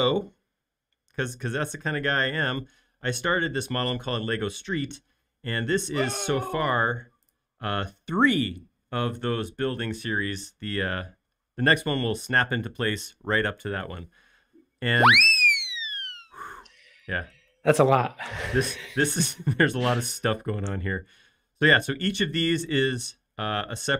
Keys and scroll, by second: 5.2 space.